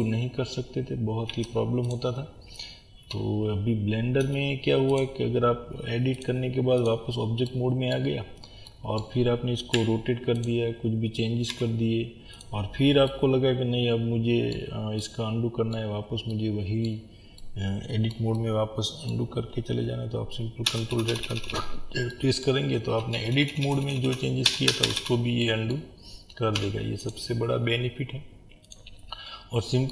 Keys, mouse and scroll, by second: 1.4 1, 1.9 click, 3.1 g, 6.9 click, 7.5-12.4 middle drag, 8.2-8.8 scroll down 1, 9.8 r, 12.8-13.2 scroll down 1, 13.2-26.6 middle drag, 16.0-16.4 scroll down 1, 17.1-17.4 scroll down 1, 20.7 ctrl+z, 22.6-23.2 scroll up 2, 23.2 ctrl+z, 25.9-26.6 scroll up 1, 26.6 Tab, 27.1 click, 27.6-28.1 scroll down 2, 28.1-28.8 scroll up 2, 28.8 click.